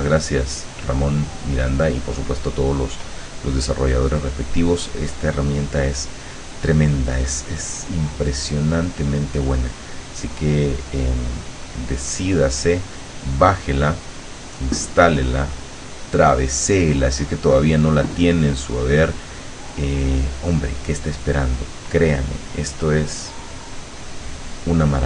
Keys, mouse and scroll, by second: 7.3 click, 8.5 click, 8.8 click, 9.7 click, 10.1-12.0 drag, 12.1-15.5 drag, 15.6 click, 17.3 click, 18.9 click, 19.9 click, 20.4 click, 21.3-25.0 drag.